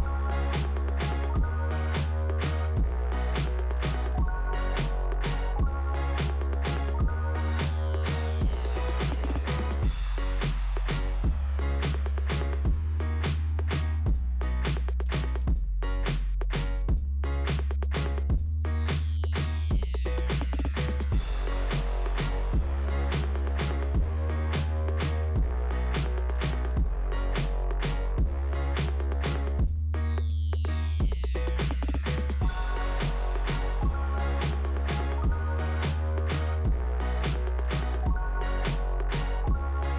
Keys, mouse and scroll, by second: 0.8 click, 1.8 click, 2.7-3.2 scroll down 1, 6.2 click, 7.7 click, 16.1 click, 17.2 click, 20.5 click, 22.3 click, 25.9 middle click, 27.4 click, 28.1 click, 30.0 click, 36.6 click, 37.8 click, 39.6 click.